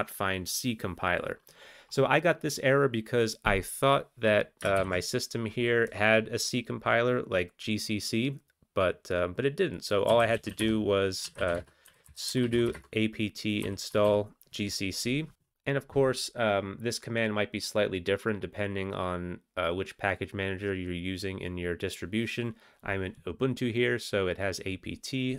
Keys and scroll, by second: 4.7 ctrl+alt+t, 10.1-11.9 typing, 13.0-14.6 typing.